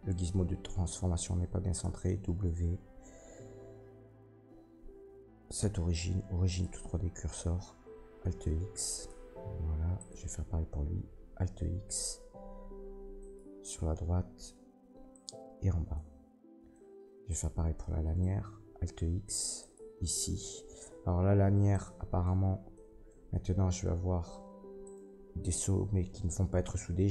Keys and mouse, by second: 1.8 w, 7.9 alt+x, 9.0-10.0 middle drag, 10.0 click, 10.1-13.2 middle drag, 13.2 click, 13.3-15.1 middle drag, 14.0 alt+x, 15.1 click, 15.3-17.3 middle drag, 17.3 click, 17.4-19.6 middle drag, 18.7 alt+x, 19.6 click, 19.7-21.6 middle drag, 21.7 click, 22.2 Tab, 23.0-24.8 middle drag, 24.8 click, 24.9-27.1 middle drag.